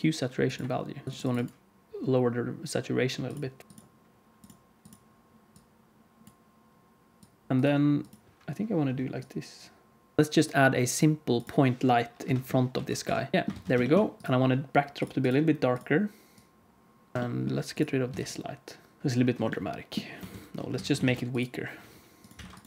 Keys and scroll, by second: 3.6 shift+a, 7.5 alt+a, 7.5 ctrl+s, 10.2 alt+a, 10.2 ctrl+s, 12.1 KP_3, 12.7 alt+g, 13.3 alt+a, 13.3 ctrl+s, 13.5 ctrl+s, 17.1 alt+a, 17.1 ctrl+s, 18.0 x, 20.2 ctrl+z, 20.7 alt+a, 21.0 ctrl+s.